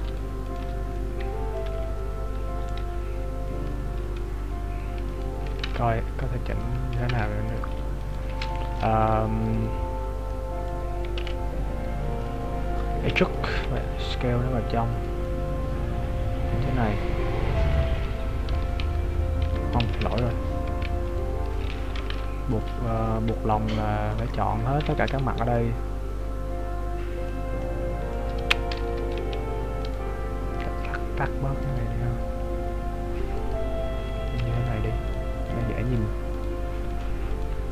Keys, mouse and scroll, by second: 0.5 alt+right click, 1.0 middle click, 1.7 KP_3, 2.2 scroll up 1, 4.0 scroll up 8, 5.7 ctrl+Tab, 5.7 right click, 8.0 alt+right click, 8.6 shift+middle click, 10.3 middle click, 11.2 KP_Decimal, 12.2 middle click, 13.3 e, 13.7 s, 15.3 middle click, 17.9 z, 18.3-18.7 scroll up 2, 18.5 z, 19.0 Tab, 19.8 ctrl+z, 21.1 right click, 22.1 ctrl+Tab, 23.1 middle click, 24.2 KP_3, 25.2 b, 27.6 middle click, 27.6-28.3 scroll up 1, 28.8 z, 29.9 right click, 31.7 click, 34.7 shift+right click, 35.2 shift+right click, 35.6 shift+right click, 35.9 shift+right click, 36.5 shift+right click, 37.2 shift+right click, 37.4 shift+right click.